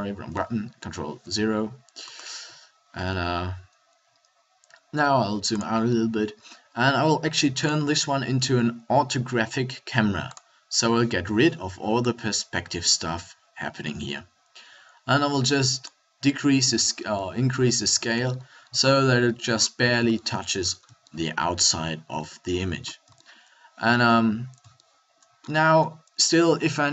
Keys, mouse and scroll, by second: 0.9 ctrl+alt+KP_0, 2.9 g, 5.7 click, 14.1-19.5 middle drag.